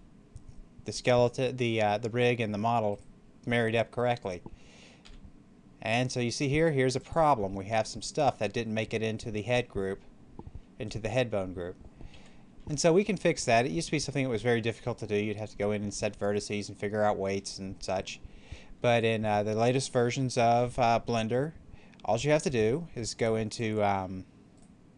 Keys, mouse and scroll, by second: 2.8 right click, 4.9 r, 6.9 click, 7.4 middle click, 12.0 middle click, 12.1 ctrl+z, 13.0-19.9 middle drag, 23.4 click, 24.4 right click.